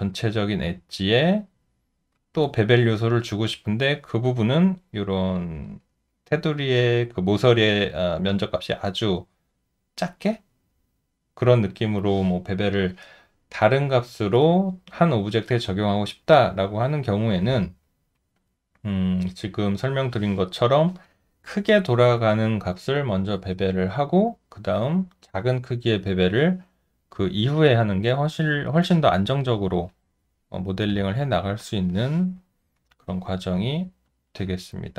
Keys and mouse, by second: 33.1 alt+click.